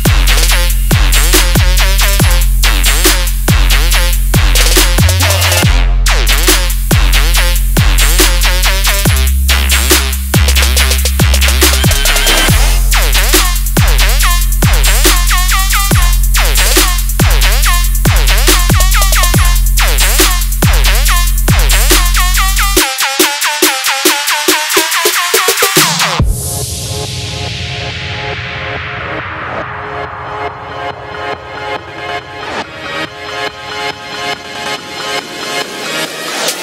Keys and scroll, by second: 26.9 ctrl+a, 27.2 ctrl+c, 27.6 ctrl+Tab, 29.2 ctrl+v, 32.5 ctrl+z.